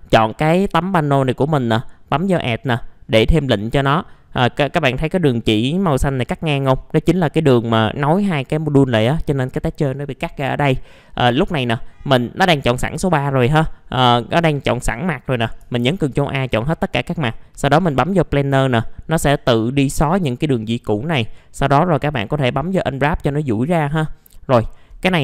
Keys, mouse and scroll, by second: 1.4 click, 6.8-7.6 scroll up 1, 10.0 middle click, 10.2-10.7 scroll down 1, 10.8-11.8 middle drag, 15.8 ctrl+a, 18.3 click.